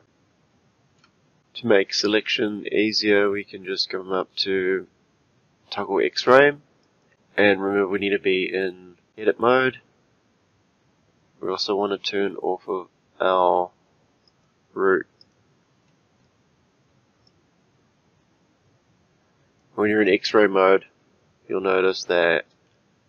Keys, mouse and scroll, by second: 0.0-1.3 shift+middle drag, 1.3-2.1 scroll up 4, 6.8-8.3 drag, 14.3 click, 15.2 click, 17.3 click, 21.8-23.0 shift+middle drag.